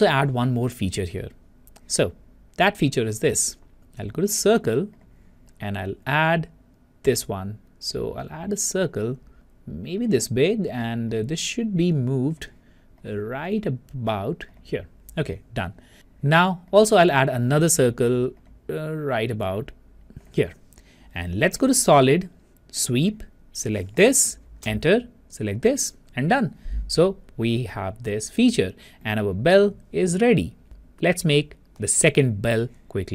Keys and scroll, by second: 24.6 Return.